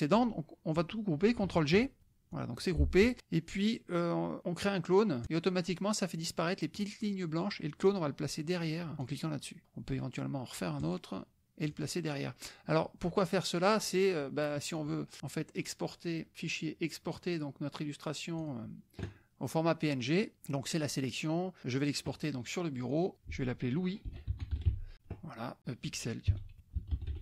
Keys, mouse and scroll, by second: 9.0 click, 10.8 click, 11.7 click, 13.4 click, 14.8 click, 18.4 click, 21.6 click, 22.8 click, 23.9-25.2 typing, 26.5-27.2 typing.